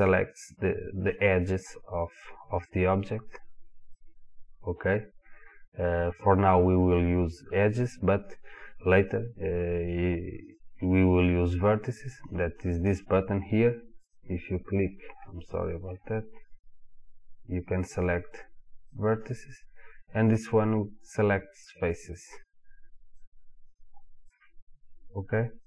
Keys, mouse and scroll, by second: 2.7 click, 6.2-9.4 drag, 10.5 click, 14.1 click, 15.2-16.5 middle drag, 16.5 click, 17.7 click, 19.0 click, 21.7 click, 22.5 click, 23.2 click, 23.7 click, 24.3 click, 25.2 click.